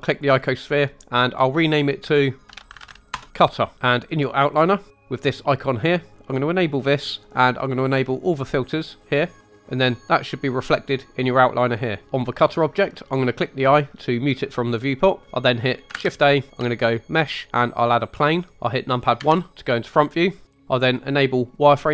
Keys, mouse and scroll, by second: 0.1 click, 0.3-3.1 drag, 2.7 t, 6.4-9.4 drag, 14.2 click, 15.9 shift+a, 19.2 KP_1, 21.5 click.